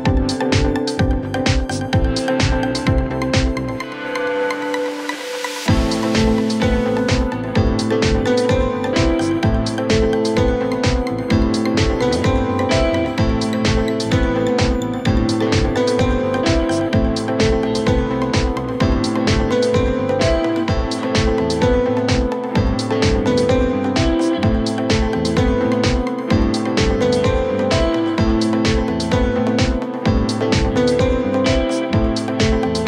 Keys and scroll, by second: 12.0 Delete, 13.1 ctrl+z, 15.7 F3, 15.9 Escape, 25.5 w.